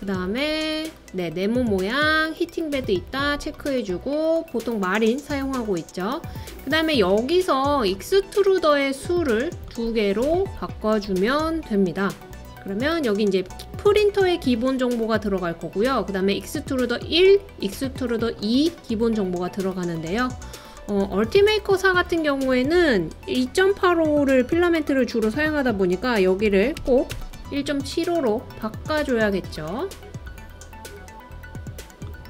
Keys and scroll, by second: 26.2-27.9 typing.